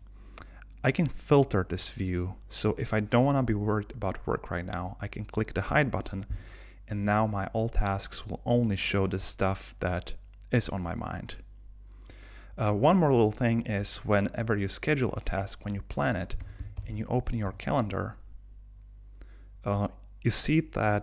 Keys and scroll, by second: 17.5 Return.